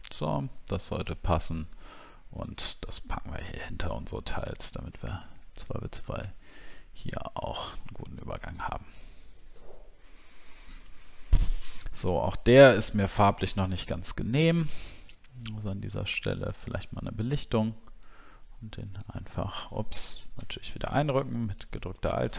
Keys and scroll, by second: 4.5-4.9 alt+scroll up 1, 7.5-7.8 alt+scroll down 1, 8.3 alt+scroll down 1, 10.3 alt+scroll down 1.